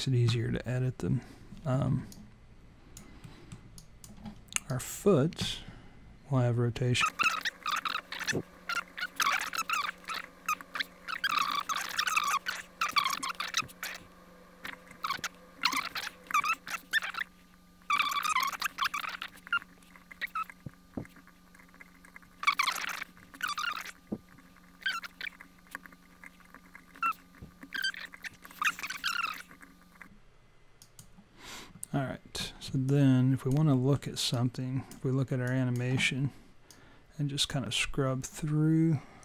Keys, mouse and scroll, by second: 2.1 alt+click, 3.2 alt+middle click, 3.7 alt+click, 4.6 click, 7.0 alt+middle click, 7.1 click, 7.3 click, 7.4 click, 7.5 shift+click, 7.7 shift+click, 8.1 right click, 8.5 click, 8.7 click, 8.8 click, 8.9 shift+click, 9.0 shift+click, 9.0 right click, 9.1 shift+click, 9.2 alt+middle click, 9.3 alt+click, 9.5 click, 9.7 click, 9.7 shift+click, 9.8 shift+click, 9.8 right click, 10.1 click, 10.7 click, 10.9 click, 11.0 click, 11.0 shift+click, 11.3 shift+click, 12.0 click, 12.3 click, 12.7 click, 13.3 click, 13.3 right click, 14.7 alt+click, 15.9 click, 15.9 shift+click, 16.0 shift+click, 16.0 right click, 16.3 alt+click, 16.4 click, 16.9 click, 17.0 click, 17.1 shift+click, 17.2 shift+click, 17.2 right click, 18.1 click, 18.1 shift+click, 18.4 shift+click, 18.4 scroll down 12, 18.6-19.0 scroll up 16, 19.1 right click, 19.5 click, 19.8 click, 19.9 click, 19.9 shift+click, 20.1 shift+click, 20.1 right click, 20.3 click, 20.4 shift+click, 20.6 shift+click, 20.6 right click, 21.2 click, 21.4 click, 21.5 click, 21.6 shift+click, 21.8 shift+click, 21.8 right click, 22.0 click, 22.1 shift+click, 22.2 right click, 23.1 click, 23.4 click, 23.7 click, 23.7 shift+click, 23.9 shift+click, 23.9 right click, 24.5 click, 24.7 click, 24.8 click, 24.9 shift+click, 25.0 shift+click, 25.0 right click, 25.2 click, 25.2 click, 25.3 shift+click, 25.4 shift+click, 25.4 right click, 25.8 click, 26.0 click, 26.0 click, 26.1 shift+click, 26.3 shift+click, 26.3 right click, 26.6 click, 27.1 click, 27.6 click, 27.9 click, 27.9 click, 28.0 shift+click, 28.1 shift+click, 28.1 right click, 28.5 alt+click, 28.5 alt+middle click, 28.7 alt+click, 29.2 shift+click, 29.3 click, 29.3 right click, 29.6 click, 29.8 click, 29.9 click, 29.9 shift+click, 30.0 shift+click, 30.0 right click, 30.3 shift+click, 32.8 alt+click, 33.7 alt+middle click, 34.3 alt+click, 35.4 alt+click, 36.7 click.